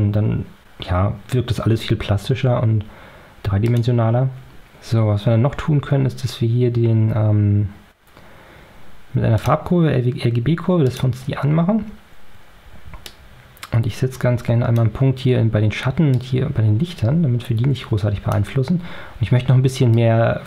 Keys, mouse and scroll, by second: 3.5 click, 9.3 click, 10.7 click, 13.0 click, 16.1-18.5 drag, 19.9 click.